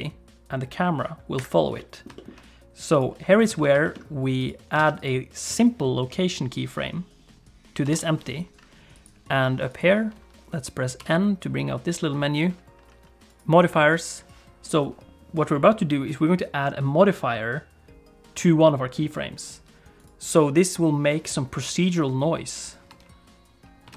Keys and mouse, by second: 1.8 middle click, 2.1 shift+middle click, 2.9 click, 3.5 ctrl+s, 3.8 shift+middle click, 4.8 alt+a, 7.8 i, 8.9 click, 9.7 click, 11.0 n, 20.0-21.9 drag, 22.9 space.